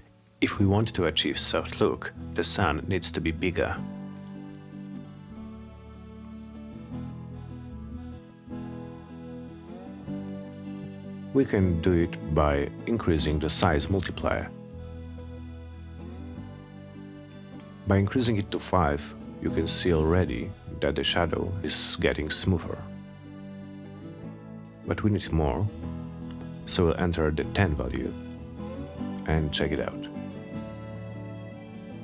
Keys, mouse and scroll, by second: 0.0 click, 1.0 middle click, 2.3 scroll down 2, 2.6 middle click, 3.1 middle click, 3.1 scroll, 3.3 middle click, 4.4 click, 8.8 click, 9.6 click, 10.7 2, 11.5 click, 12.8 5, 13.3 Return, 15.3 click, 22.4 click, 24.7 click, 26.4 Return, 28.6 click.